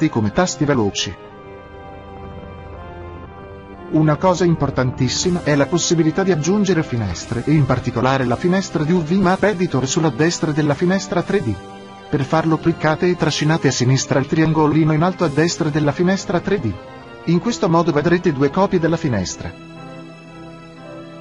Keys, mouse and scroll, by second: 1.2-3.0 drag, 4.4-7.7 middle drag, 9.4-11.7 drag, 13.9-20.7 drag.